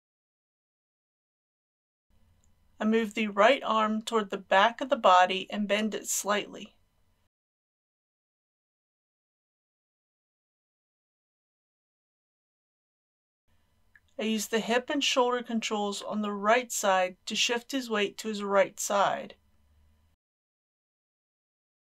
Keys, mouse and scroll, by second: 0.3 r, 0.9 click, 6.5 g, 6.7 x, 8.7 click, 9.1 g, 11.0 click, 12.6 middle click, 13.1 scroll up 1, 15.9 click, 17.2 r, 20.7 click, 21.2 middle click.